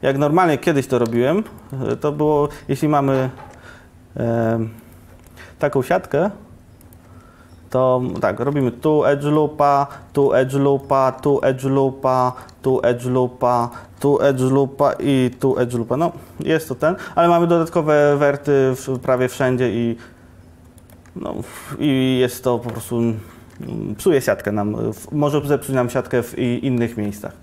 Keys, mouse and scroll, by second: 1.2 e, 2.9 Tab, 3.4 Tab, 7.1 Tab, 8.3 ctrl+r, 10.2 ctrl+r, 10.2-12.4 drag, 12.8 ctrl+r, 13.9 ctrl+r, 15.2 click, 17.9 1, 23.2 Tab, 23.5 Tab, 26.7 Tab.